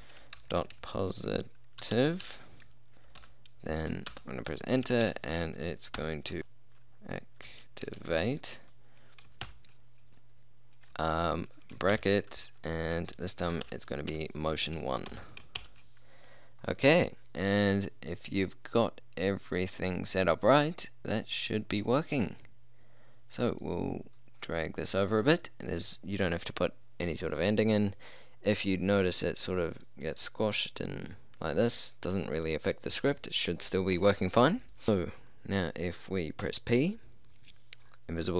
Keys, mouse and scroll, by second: 0.0-0.8 typing, 1.9-3.3 typing, 4.2 Return, 4.9-8.2 typing, 9.5 shift+9, 12.0-15.7 typing, 23.7 click, 24.0-26.8 middle drag, 35.0-36.5 middle drag, 36.5 p.